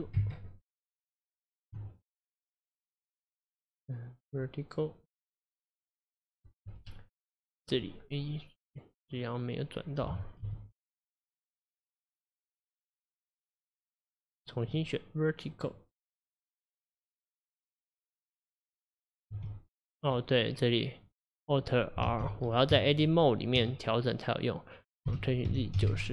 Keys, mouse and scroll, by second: 2.3 click, 8.7 click, 10.5 r, 12.1 click, 13.5 click, 14.6 click, 17.6 click, 19.3 r, 23.6 Tab, 25.1 r.